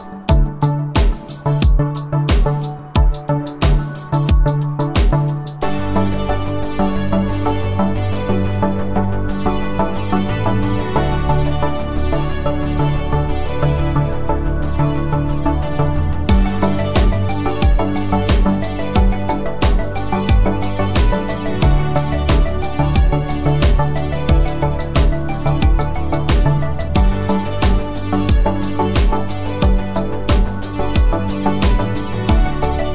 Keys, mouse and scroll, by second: 6.0 space, 6.5 click, 6.8-7.5 space, 7.5 space, 7.7-8.3 click, 10.0 space, 10.3 click, 10.5-10.9 space, 11.2-11.8 click, 24.6 click, 26.8 click, 30.8 F9, 32.2-32.8 click.